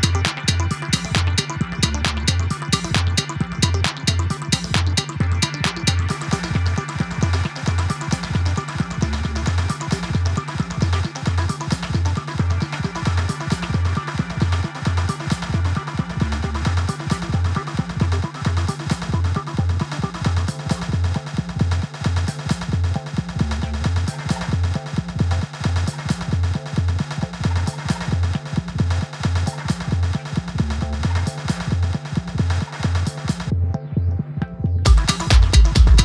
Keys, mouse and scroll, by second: 6.7 click, 10.9 click, 11.5 ctrl+j, 13.3 click, 14.3 Tab, 15.6 click, 17.2 Tab, 22.2-29.6 drag.